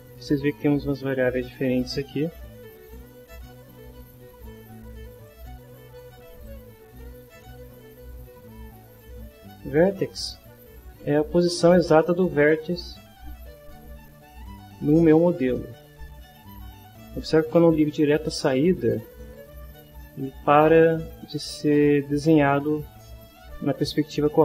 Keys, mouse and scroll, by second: 0.1 click, 2.9 click, 4.9 click, 6.4-7.7 drag, 8.3-9.7 drag, 14.4-16.7 drag, 18.1 click, 19.8 middle click, 20.9 middle click, 21.8 middle click.